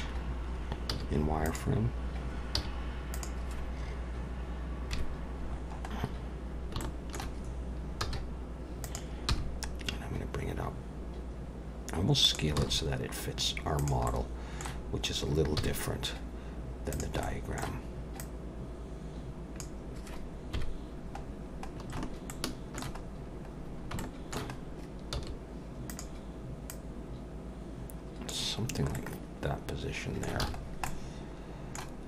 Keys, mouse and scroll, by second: 0.0-0.7 scroll down 1, 0.7 scroll down 1, 0.9 z, 2.6 z, 4.9 KP_Decimal, 5.5-6.8 scroll down 9, 6.8 scroll down 1, 6.8 shift+middle click, 8.0 s, 9.3 g, 12.6 s, 14.1 middle click, 15.6 z, 17.2 middle click, 18.2 click, 20.5 KP_1, 21.3-21.9 scroll down 1, 21.9-22.3 scroll down 1, 22.3 shift+middle click, 23.0-23.9 scroll up 5, 24.0 shift+middle click, 24.5-24.9 scroll up 2, 25.1 s, 26.7 click, 28.7-29.4 scroll down 3, 28.9 middle click, 30.4 alt+a, 30.6-31.5 scroll down 2, 30.9 middle click.